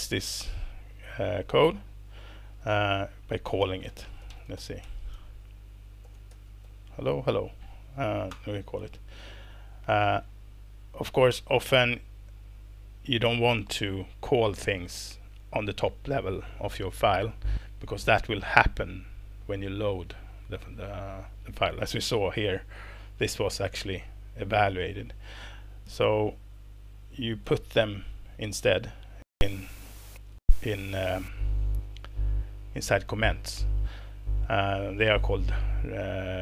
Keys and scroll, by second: 2.5 Return, 2.9 Return, 3.3-7.1 typing, 8.3 alt+Return, 9.5 Escape, 11.0 Left, 27.0 ctrl+w, 28.6 BackSpace, 29.6 BackSpace, 30.1 Escape.